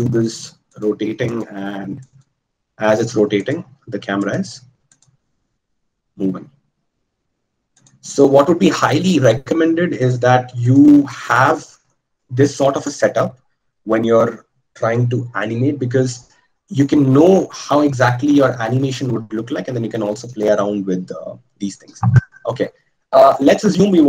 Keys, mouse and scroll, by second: 3.2-24.0 drag.